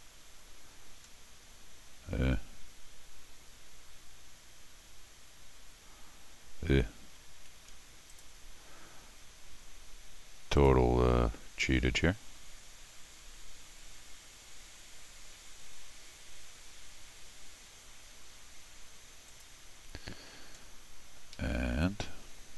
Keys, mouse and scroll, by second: 1.0 middle click, 7.4 a, 8.1 click, 10.6 click, 19.3 click, 20.6 scroll down 1, 21.3 Escape.